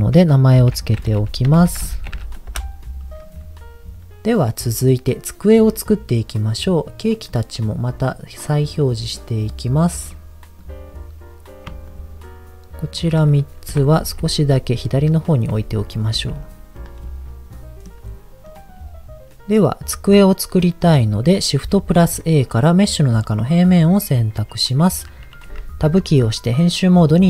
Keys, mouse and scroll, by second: 4.4-4.8 scroll down 2, 7.8 click, 9.3 click, 10.0 click, 10.6 click, 11.8 shift+click, 12.8 shift+click, 13.6 KP_7, 14.2 g, 15.2 click, 15.5 r, 16.0 click, 16.2 g, 16.8 click, 17.0 middle click, 18.0-18.4 scroll down 1, 18.4 click, 18.9 middle click, 20.7 middle click, 21.9 shift+a, 24.4-25.4 scroll down 1, 25.8 Tab.